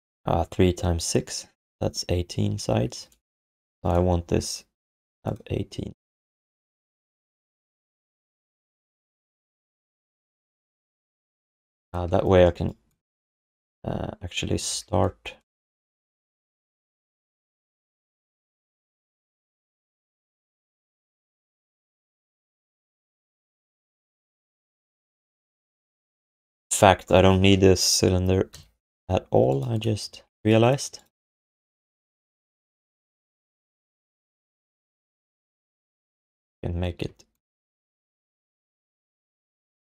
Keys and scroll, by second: 12.0 w, 14.6 alt+shift+d, 15.6 q, 17.6 ctrl+z, 17.8 ctrl+z, 18.0 ctrl+z, 18.2 ctrl+z, 18.4 ctrl+z, 35.9 r, 39.1 q, 39.7 alt+shift+d.